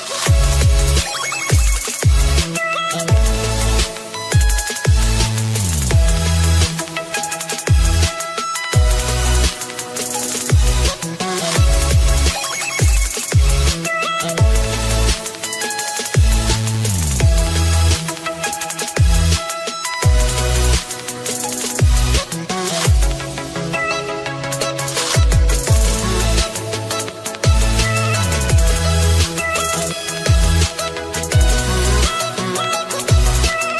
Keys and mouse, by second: 0.0-3.2 typing, 0.9 click, 3.8 click, 5.1 click, 5.1-6.6 typing, 6.1 click, 9.7 click, 11.9 click, 14.2 click, 15.4 Return, 16.4 Right, 17.0-19.9 typing, 22.0 Right, 22.0 Return, 22.0 BackSpace, 22.0 d, 22.8 Right, 22.8 Return, 22.8 BackSpace, 23.9 BackSpace, 25.8-28.9 typing, 32.7-33.5 typing, 33.4 click.